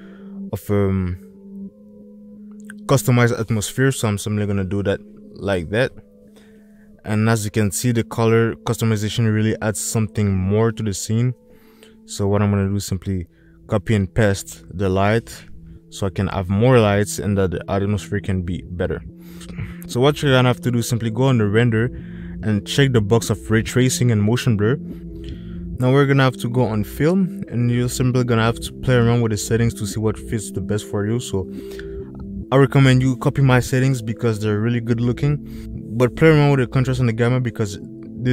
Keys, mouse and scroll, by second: 1.2 space, 3.0 space, 12.2 click, 13.5 ctrl+c, 14.4 ctrl+v, 15.2 click, 18.0 click, 22.6 click, 25.9 click, 32.7-33.6 drag, 35.4-37.6 drag.